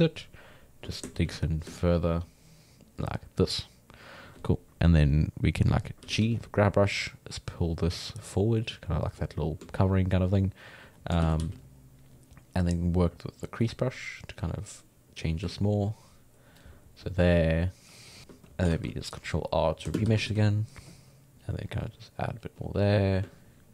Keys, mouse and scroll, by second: 1.2 shift+f, 1.8-4.8 ctrl+drag, 6.0 g, 6.2 f, 7.0 middle click, 7.5-9.8 drag, 9.8 shift+middle click, 10.3 click, 11.2 shift+c, 11.4 f, 13.7-18.7 drag, 18.7 ctrl+r, 20.0 shift+space, 20.2 f, 20.9-23.7 drag.